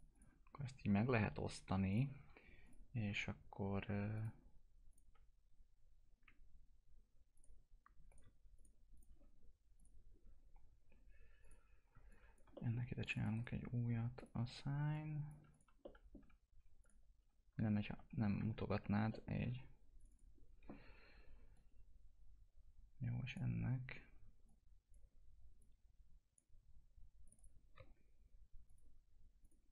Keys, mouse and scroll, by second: 0.5 F4, 1.9 click, 3.1 click, 9.8 click, 12.5 middle click, 13.0 click, 13.3 right click, 14.2 click, 15.8 middle click, 16.2 F2, 16.8 click, 17.2 F2, 19.1 middle click, 20.0-27.2 drag.